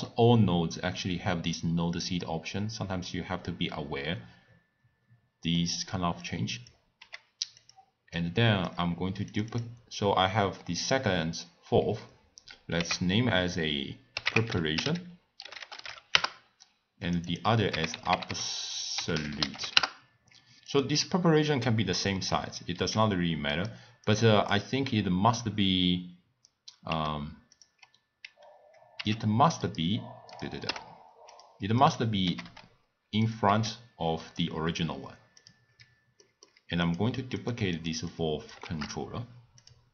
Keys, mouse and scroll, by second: 0.0 click, 5.5-6.2 middle drag, 6.2 click, 6.9 g, 8.1 click, 9.2 click, 9.5-12.6 drag, 17.0 click, 17.2-20.3 drag, 20.6 click, 23.5-24.1 right drag, 24.5 click, 26.9 t, 27.5-28.9 drag, 28.9 v, 29.6-30.4 right drag, 30.6 t, 31.3 click, 31.8 click, 32.2 g, 33.5 s, 36.2-36.8 middle drag, 36.8 click, 37.4 click, 37.7 click, 38.1-39.1 drag, 39.1 shift+d.